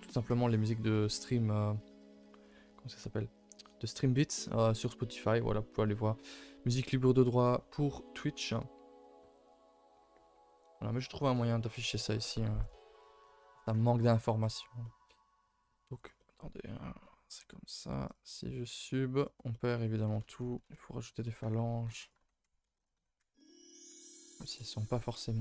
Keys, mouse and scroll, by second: 12.5 click, 12.9 middle click, 13.2 a, 13.4 a, 13.5 scroll down 2, 13.7 middle click, 14.0 ctrl+s, 14.2-16.0 middle drag, 16.0 scroll down 4, 16.1-18.0 middle drag, 18.0 click, 19.1 click, 19.5 middle click, 19.7 scroll up 2, 19.9 a, 20.1 a, 20.1 middle click, 20.3-21.2 scroll up 3, 21.2 middle click, 21.7 ctrl+r, 22.6 ctrl+r, 23.3 ctrl+r, 24.5 middle click, 24.7 scroll down 1, 25.0 middle click.